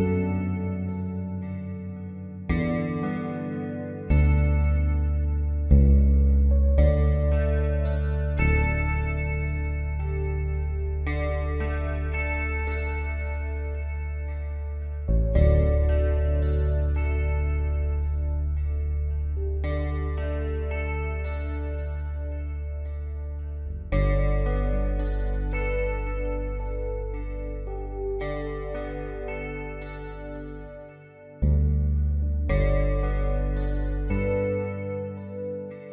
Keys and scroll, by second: 15.0 b, 16.3 typing, 18.1-20.0 typing, 25.5-26.0 typing, 34.1-34.4 typing.